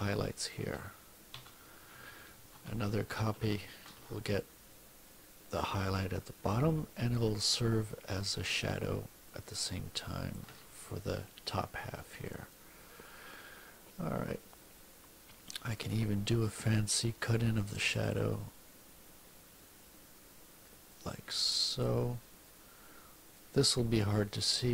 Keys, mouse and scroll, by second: 1.3 ctrl+z, 2.5 ctrl+c, 3.6 ctrl+alt+v, 4.4-10.5 ctrl+shift+drag, 15.8 click, 17.4 click, 20.9 click, 23.3-24.7 drag.